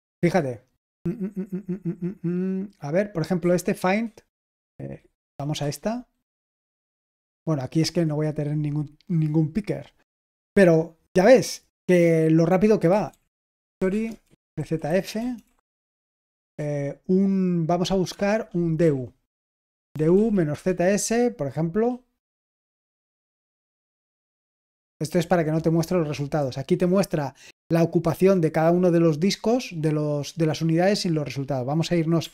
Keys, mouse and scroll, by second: 3.4 j, 5.1 Down, 5.5 Return, 12.6-16.7 typing, 18.5-19.3 typing, 19.9 Down, 20.1 Down, 20.4 Return.